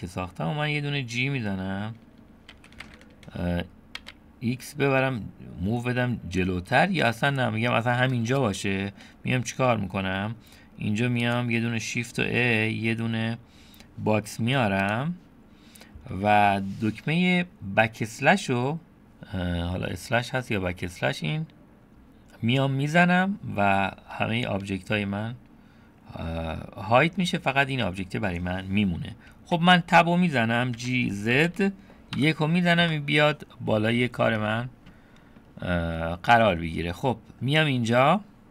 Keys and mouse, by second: 2.5 g, 8.4-9.0 drag, 11.3 click, 12.4 shift+a, 18.9 /, 26.3-27.2 middle drag, 29.6 Tab, 30.8 g, 34.3-35.6 middle drag, 37.0 middle click.